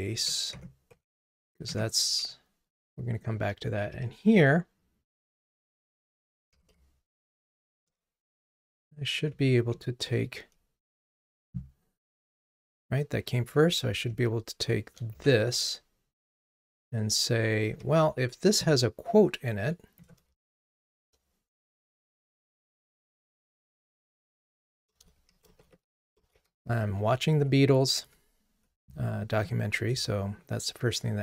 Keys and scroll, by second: 7.8 Return, 9.3 Delete.